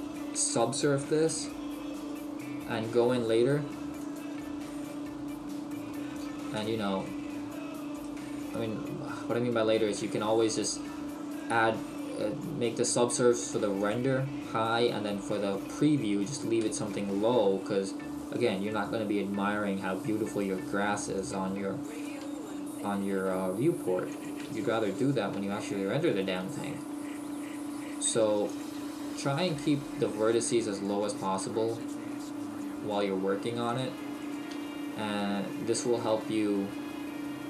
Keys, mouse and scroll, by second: 0.1 right click, 1.3 s, 2.1 right click, 2.9 g, 4.2 click, 4.9 middle click, 6.7 KP_1, 8.0 right click, 8.2 g, 10.7 click, 11.4 right click, 11.7 g, 13.9 click, 14.7 right click, 15.0 g, 16.4 click, 17.0 shift+middle click, 18.2 right click, 18.8 right click, 19.0 g, 21.3 click, 22.0 right click, 22.2 g, 24.3 click, 24.7 shift+middle click, 26.1 right click, 26.4 g, 28.6 click, 29.3 right click, 31.8 right click, 34.3 right click, 36.9 g.